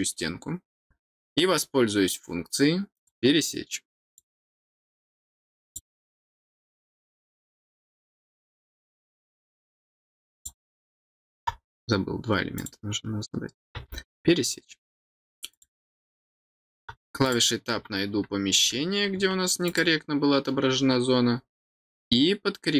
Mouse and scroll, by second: 2.9 click, 4.0 click, 5.6 click, 6.8 click, 8.4 click, 10.3 click, 11.0 click, 12.5 click, 15.5 click, 17.2 click, 19.6 click, 20.7 middle click.